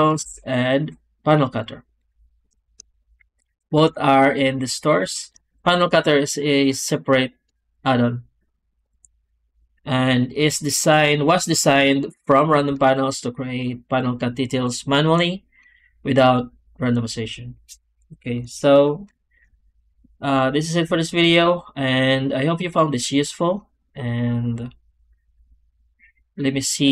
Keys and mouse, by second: 0.1 w, 5.4 w, 20.2 middle click.